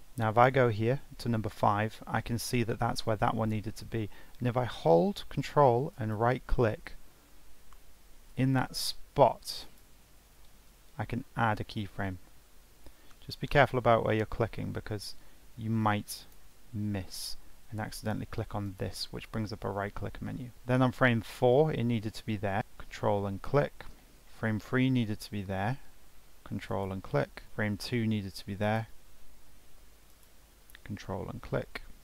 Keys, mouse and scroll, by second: 0.4-3.5 drag, 15.8-19.0 drag, 24.2-26.7 drag, 27.4-30.2 drag.